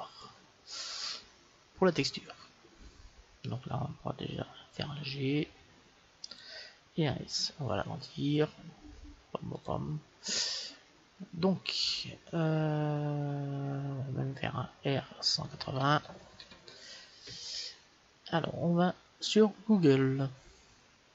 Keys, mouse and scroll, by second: 2.0-4.1 middle drag, 4.8 g, 7.3 s, 14.8 r.